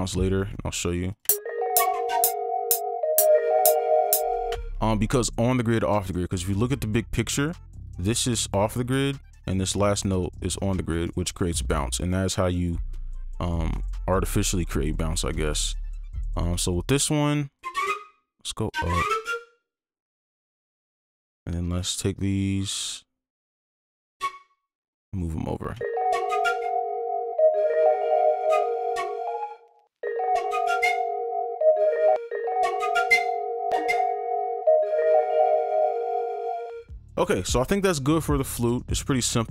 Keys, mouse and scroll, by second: 0.2 double click, 4.5 space, 7.8 double click, 9.4 right click, 9.9 double click, 11.0 right click, 13.2 double click, 21.5 click, 23.6 right click, 27.5 click, 28.1-29.8 alt+scroll up 2, 29.8 alt+scroll up 1, 30.0 space, 31.7-32.1 alt+scroll down 1, 32.1 alt+space, 34.8 right click, 36.6 space.